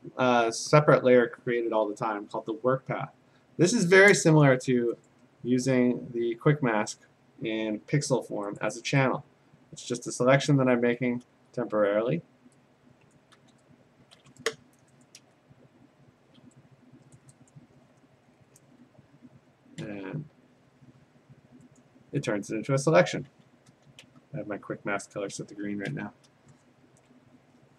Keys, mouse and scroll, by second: 2.4 click, 5.1 click, 5.7 click, 6.4 q, 8.6 click, 10.2 click, 11.2 ctrl+z, 11.8 q, 13.1 click, 13.4 q, 15.0 click, 15.3-16.4 ], 17.2 click, 17.5 click, 19.8 q, 21.8 click, 23.3 q, 23.7 q, 24.0 q, 25.8 typing, 27.4 ctrl+d.